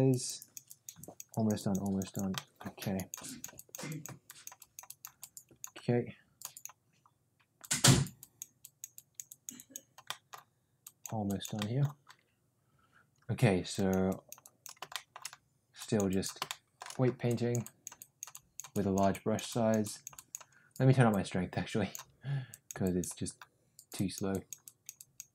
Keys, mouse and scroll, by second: 0.1 click, 0.4 click, 0.6 click, 1.0 click, 1.3 click, 1.5 click, 1.8 click, 2.1 click, 2.3 middle click, 2.9 click, 3.2 click, 3.5 click, 3.9 click, 4.2 click, 4.6 click, 4.8 click, 5.2 click, 6.4 click, 7.5 click, 8.1 click, 8.5 click, 8.9 click, 9.2 click, 9.5 click, 10.0 middle click, 10.9 click, 11.2 click, 11.5 middle click, 13.6 click, 14.0 click, 14.4 click, 14.9 shift+middle click, 15.7 click, 16.1 click, 16.5 shift+middle click, 17.2 click, 17.6 click, 17.9 click, 18.3 click, 18.7 click, 19.1 click, 19.4 click, 19.8 click, 20.1 click, 21.1 click, 22.4 click, 22.8 click, 23.9 click, 24.3 click, 24.6 click, 24.9 click.